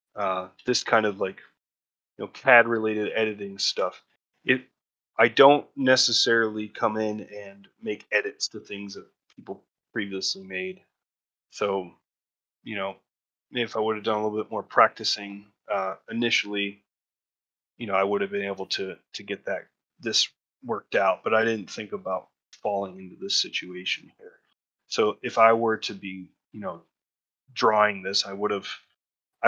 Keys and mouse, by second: 0.0 ctrl+middle click, 0.3 middle click, 0.6 shift+middle click, 1.1 middle click, 2.0 middle click, 2.4 ctrl+middle click, 2.7 middle click, 3.5 ctrl+middle click, 3.8 shift+middle click, 4.2 middle click, 4.8 ctrl+middle click, 5.1 shift+middle click, 5.5 middle click, 6.7 middle click, 7.1 shift+middle click, 8.3 ctrl+shift+middle click, 9.8 shift+middle click, 10.4 middle click, 10.9 ctrl+middle click, 11.2 shift+middle click, 11.5 middle click, 12.0 alt+middle click, 12.8 ctrl+middle click, 13.4 shift+middle click, 18.2 ctrl+middle click, 18.6 shift+middle click, 24.6 ctrl+middle click, 25.1 shift+middle click, 25.4-26.6 middle drag, 27.0 ctrl+middle click, 28.0 shift+middle click, 28.3 middle click, 28.8 shift+middle click.